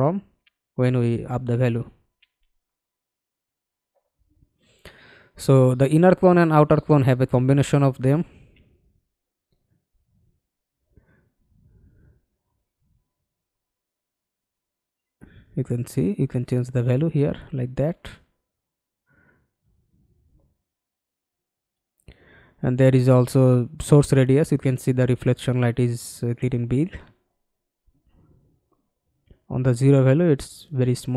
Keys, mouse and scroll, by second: 1.9-2.3 scroll down 2, 2.6-2.9 scroll up 2.